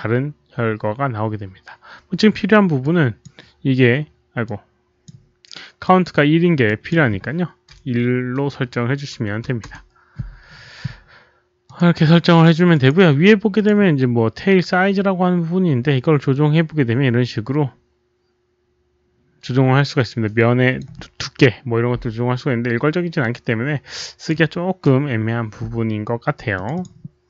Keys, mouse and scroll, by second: 1.7 click, 2.7-3.2 drag, 4.4-5.0 drag, 5.8 click, 6.6 click, 9.2 click, 9.2 BackSpace, 9.6 Return, 11.6 click, 11.7 Return, 11.7 BackSpace, 12.6 Return, 12.6 click, 12.6 BackSpace, 13.1 Return, 13.1 BackSpace, 13.5 click, 16.3 Return, 16.3-20.7 drag, 16.3 BackSpace, 18.5 Return, 18.5 BackSpace, 23.1-24.2 drag, 26.5 click, 26.7 click.